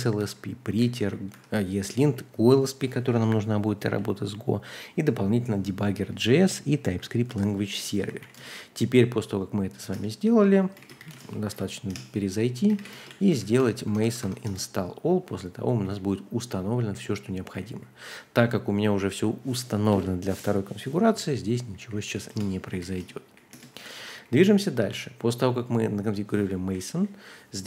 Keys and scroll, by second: 0.0-2.5 typing, 0.2 Escape, 4.2 typing, 5.8-8.7 typing, 9.9 Return, 10.5-13.8 typing, 11.9 Return, 14.0 Tab, 14.2 Tab, 14.4 Return, 15.7-17.7 typing, 19.9-24.0 typing, 24.4 ctrl+d, 24.9 ctrl+d, 26.1-27.4 typing.